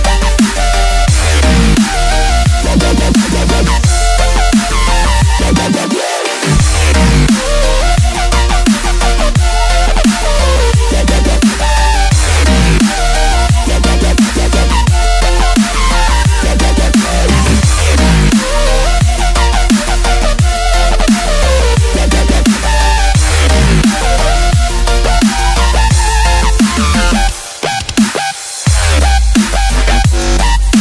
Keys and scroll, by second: 0.0-2.7 typing, 4.2 space, 5.1 z, 5.2 space, 5.7 9, 7.2-10.7 typing, 11.8 ctrl+z, 13.2-16.3 typing, 13.8 Escape, 17.4 space, 17.5 x, 18.1 z, 19.8 space, 20.7 ctrl+z, 20.9 x, 21.9-26.3 typing, 25.3 ctrl+z, 27.5-30.8 typing.